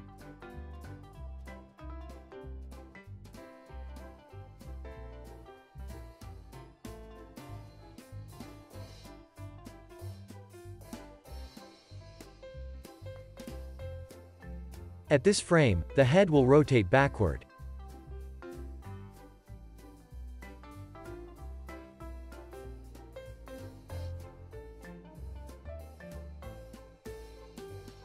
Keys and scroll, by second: 0.3 alt+q, 0.8 super+s, 5.4 super+s, 10.2 z, 10.9 x, 11.8 super+s, 12.3-14.6 typing, 17.1 z, 17.7 x, 23.1 z, 24.4 x, 25.6 x, 26.1 z, 26.9 alt+w, 27.4 z, 27.7 x.